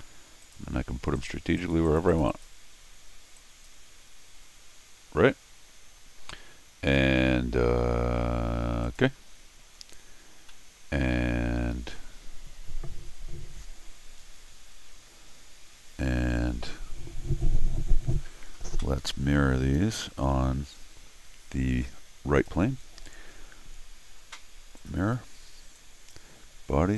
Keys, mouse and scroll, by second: 0.4 click, 1.2 click, 1.6 click, 1.8 click, 2.1 click, 2.3 click, 3.4 click, 8.8 click, 9.8-10.5 scroll down 2, 10.5-11.9 middle drag, 20.7-21.4 scroll down 2, 22.4 click, 24.8 click, 25.7 click.